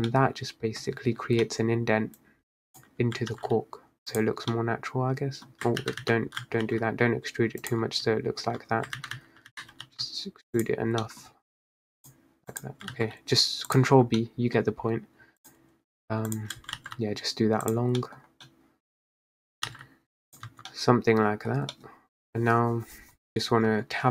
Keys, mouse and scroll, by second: 0.2-0.9 middle drag, 0.9 scroll down 1, 1.1 Tab, 1.5-2.3 middle drag, 2.3 click, 3.4 ctrl+b, 4.4 Tab, 4.6-5.9 middle drag, 5.9 ctrl+z, 6.1 ctrl+z, 6.7 ctrl+b, 7.9 Tab, 8.6 Tab, 9.0 ctrl+z, 9.2 ctrl+z, 9.6 ctrl+z, 9.9 ctrl+b, 10.8 Tab, 11.1-11.4 middle drag, 11.4 Tab, 12.1 click, 12.6 click, 13.0 ctrl+b, 14.0 Tab, 14.3 middle click, 14.8 Tab, 15.5 click, 16.4 shift+click, 16.8 ctrl+b, 17.9 Tab, 18.1 middle drag, 18.3 scroll down 3, 18.5 middle click, 19.0 scroll up 2, 19.1 Tab, 19.6 click, 19.8 ctrl+b, 20.5 Tab, 20.8-21.6 middle drag, 21.6 scroll down 2, 21.9-23.3 middle drag, 23.3 Tab, 23.4 Tab, 23.8 Tab.